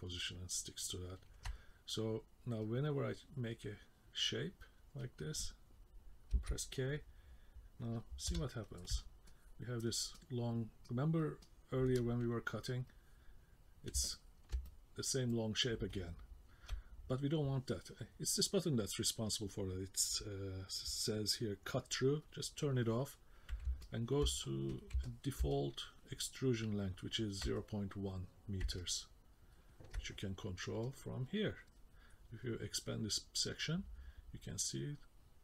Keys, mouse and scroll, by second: 2.6 click, 6.3 k, 8.3 KP_0, 9.3 middle click, 9.7 alt+F14, 9.7 alt+F14, 9.8 alt+F13, 10.2 middle click, 10.8 middle click, 11.4 middle click, 12.9 middle click, 14.2 ctrl+middle click, 14.7 middle click, 15.3 middle click, 22.3 click, 23.8 ctrl+middle click, 24.3 middle click, 25.0 ctrl+middle click, 25.5 middle click, 26.2 middle click, 28.8 middle click, 30.9 click, 34.3 click.